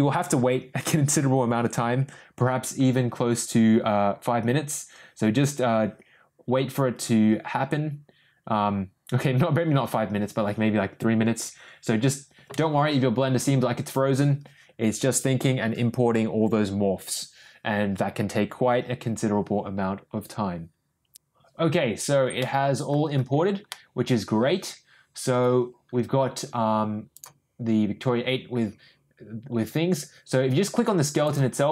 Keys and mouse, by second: 22.3-22.8 middle drag, 23.6-25.3 middle drag.